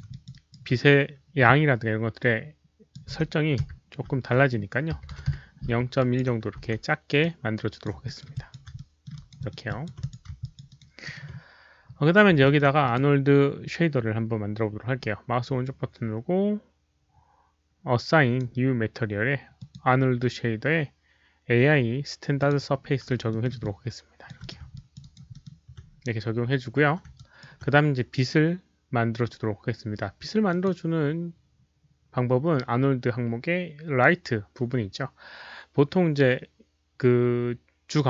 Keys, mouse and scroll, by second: 0.0 alt+click, 0.2 alt+right drag, 2.1 alt+click, 3.1-3.9 typing, 3.4 alt+right click, 3.4 middle click, 4.9-7.0 typing, 5.9 alt+drag, 6.1 alt+right click, 6.5 alt+right click, 7.1-7.8 alt+drag, 8.0 alt+middle drag, 8.3 alt+drag, 8.7 alt+middle drag, 9.1 alt+right drag, 9.3 alt+middle click, 9.6 alt+click, 9.8 Return, 9.8 w, 9.9 alt+click, 10.3 alt+click, 10.6 alt+right click, 11.0 alt+middle click, 12.4 alt+middle click, 12.8 alt+click, 14.5 alt+click, 14.5 alt+middle click, 14.9-18.3 alt+right drag, 18.3 alt+click, 18.3 alt+middle click, 19.5 click, 20.2 alt+middle click, 22.3 click, 22.4 right click, 22.4 alt+middle click, 23.2 alt+middle drag, 23.2 right click, 23.5-24.2 alt+drag, 24.0 right click, 24.3 alt+click, 24.7 alt+click, 24.9 alt+right drag, 25.2 alt+middle click, 27.1 alt+middle click, 27.1 alt+click, 27.1 alt+right drag, 27.3 alt+click, 28.7 alt+right click, 28.7 alt+middle click, 28.7 alt+click, 30.4 click, 30.6 alt+right click, 30.6 alt+middle click, 33.1 alt+click, 33.1 alt+middle click, 35.2 alt+click, 35.2 alt+right click, 35.2 alt+middle click, 36.7 click, 36.7 alt+right click, 37.9 click.